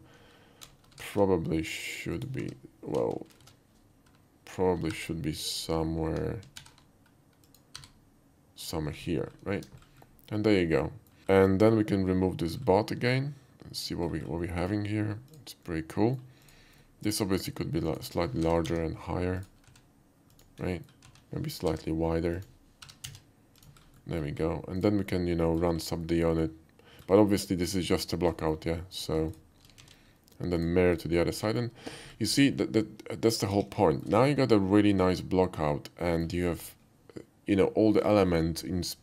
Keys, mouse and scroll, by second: 1.1 alt+r, 2.2 alt+click, 2.5 h, 3.3 ctrl+z, 3.5 ctrl+z, 5.0 alt+r, 5.5 click, 6.5 alt+r, 7.5 click, 7.8 g, 8.6 click, 9.3 middle click, 9.5 Tab, 10.1-11.1 middle drag, 11.3 middle click, 12.6 middle click, 13.8 click, 14.5 middle drag, 15.0 middle click, 15.2 click, 15.7-16.2 middle drag, 16.4 click, 16.8 middle drag, 17.2 s, 17.9 right click, 18.4 g, 18.7 z, 18.8 g, 19.4 click, 19.7 s, 20.3 click, 20.7 middle click, 21.7 y, 22.3 click, 22.8 g, 23.1 z, 23.2 g, 23.6 click, 23.8 scroll down 1, 24.0 middle drag, 24.4 scroll up 1, 24.8 click, 25.1-25.6 middle drag, 26.1-27.0 middle drag, 27.6 middle click, 28.0 shift+click, 28.4 shift+middle click, 28.9 shift+click, 29.3 shift+click, 29.8 alt+x, 30.6 click, 31.0 click, 31.5 alt+middle drag, 32.7-33.4 alt+middle drag, 33.6 KP_5, 33.9 middle drag, 34.3-36.3 middle drag.